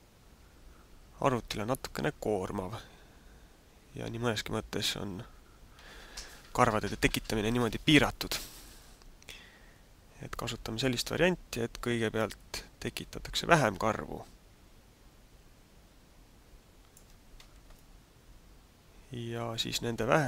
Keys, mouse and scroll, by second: 12.4 click, 17.7 middle click, 19.9 shift+middle click.